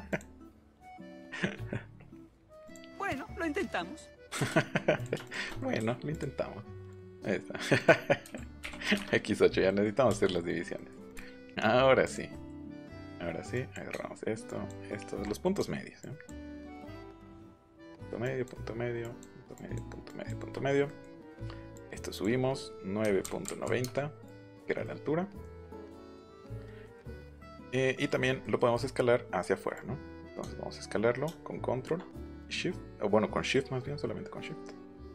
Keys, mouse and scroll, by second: 0.0 click, 0.7 click, 1.0 Escape, 2.6 click, 3.5 click, 3.7 shift+middle click, 4.9 click, 5.2 shift+click, 6.0 click, 6.8 click, 7.7 click, 8.6 8, 8.9 Return, 11.0 click, 12.0 click, 12.3 middle click, 12.6 middle click, 12.9 middle click, 13.5 click, 14.4 ctrl+click, 15.9 ctrl+click, 17.1 ctrl+click, 17.7 ctrl+click, 18.2 ctrl+click, 19.0 ctrl+click, 19.5 ctrl+click, 20.0 ctrl+click, 21.7 click, 23.0 KP_9, 23.2 KP_Decimal, 23.4 KP_9, 23.8 KP_Enter, 24.1-25.3 scroll down 4, 29.7-35.1 drag.